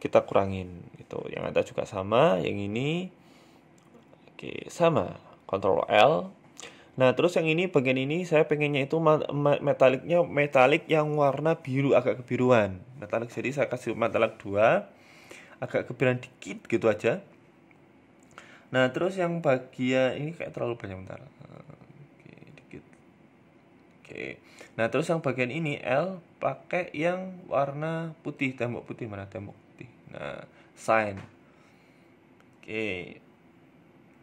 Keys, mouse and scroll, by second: 0.5 right click, 1.1 right click, 1.4 shift+right click, 2.0 ctrl+l, 2.9 middle click, 3.7-4.2 scroll down 2, 3.9 shift+middle click, 4.2 middle click, 5.1 right click, 5.4 scroll up 1, 5.6 shift+middle click, 6.1 middle click, 6.4 middle click, 6.7 shift+middle click, 7.0 click, 9.4 click, 9.7 click, 12.4 click, 16.7 middle click, 18.2 click, 23.2 scroll up 2, 23.5 shift+middle click, 24.1 Tab, 25.0 a, 25.1 a, 25.3 l, 26.3 click, 26.9 click, 30.1 click, 30.4 Tab, 30.6 middle click, 30.9 scroll down 1, 31.1 shift+middle click, 31.4 middle click, 32.1 scroll up 1, 32.2 shift+middle click, 32.7 right click, 33.3 click, 33.7 click.